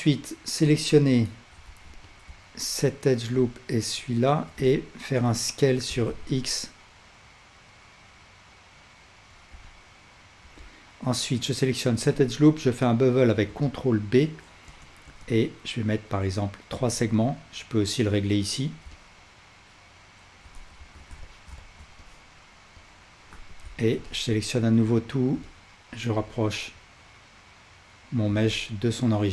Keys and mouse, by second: 0.9 2, 1.7 alt+z, 2.7-4.4 shift+drag, 4.7-9.5 alt+drag, 5.9 s, 9.8-17.0 alt+drag, 10.9 alt+middle click, 10.9 alt+right click, 13.5 ctrl+b, 19.0-29.3 alt+drag, 20.8 alt+z, 23.3 a.